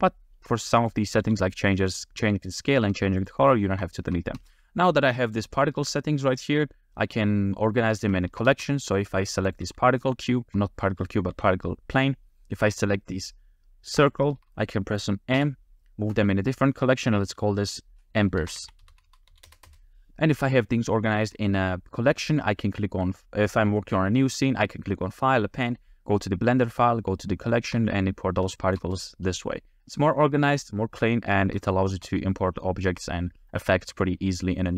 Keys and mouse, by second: 1.2 s, 2.2 s, 2.5 click, 2.9 r, 3.0 r, 3.2 drag, 4.0 shift+middle drag, 4.4 space, 5.3 click, 8.3 shift+middle click, 8.5 space, 9.0 click, 9.6 g, 10.0 click, 11.3 g, 14.0 shift+click, 15.4 m, 19.7 Return, 27.3 shift+middle drag, 28.6 shift+middle click, 28.8 space, 30.6-31.2 middle drag, 31.8 shift+middle click, 32.2-32.7 middle drag, 33.6-34.7 middle drag.